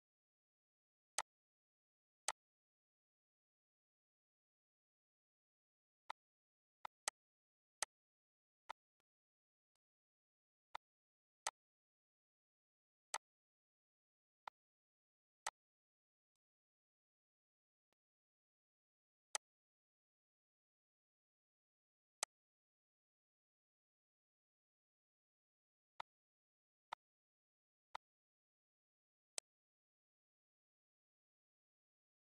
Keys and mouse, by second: 2.2 ctrl+s, 3.5 click, 4.0 ctrl+shift+click, 4.6 click, 5.3 click, 6.1 click, 6.7 click, 8.1 click, 9.3 click, 10.2 click, 11.0 click, 12.6 click, 13.8 click, 15.6 ctrl+d, 16.4 click, 19.6 click, 20.4 click, 21.2 click, 22.5 click, 24.2 ctrl+d, 25.1 click, 26.3 click, 27.1 click, 28.7 click, 29.4 click.